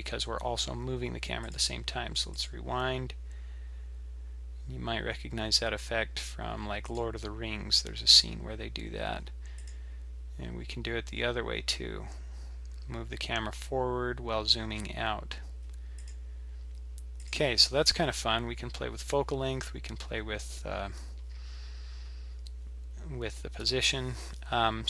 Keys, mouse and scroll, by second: 1.4 click, 1.5 click, 2.3 click, 2.4 click, 6.9 click, 9.6 click, 16.0 click, 17.2 click, 17.3 click.